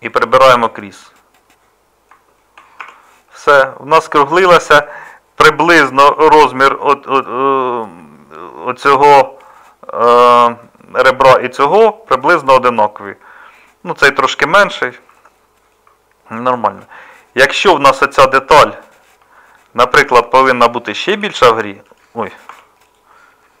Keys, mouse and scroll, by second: 2.8 Tab, 12.1-15.2 middle drag, 15.9 middle click, 18.5 Tab, 21.1 s, 22.5 Tab.